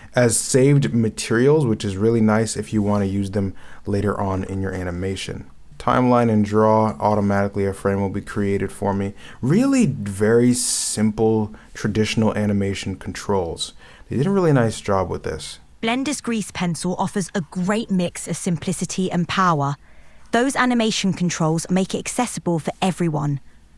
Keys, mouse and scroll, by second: 4.4 ., 4.8 ,.